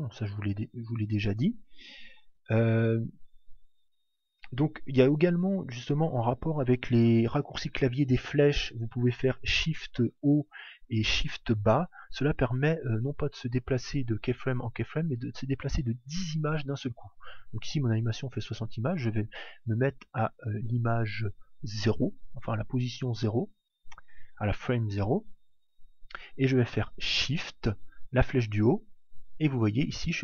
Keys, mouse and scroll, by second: 0.7 alt+a, 1.5 alt+a, 13.2 click, 17.4 click, 28.8 shift+Up.